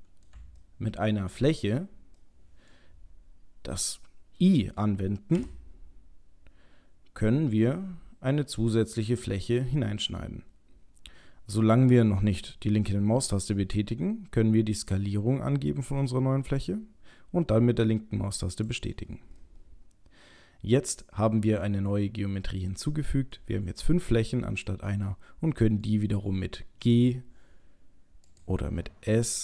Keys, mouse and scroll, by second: 0.2 middle click, 0.6 shift+middle click, 2.2 middle click, 19.4 middle click, 23.3 middle click, 25.1 middle click, 26.8 g, 29.1 s.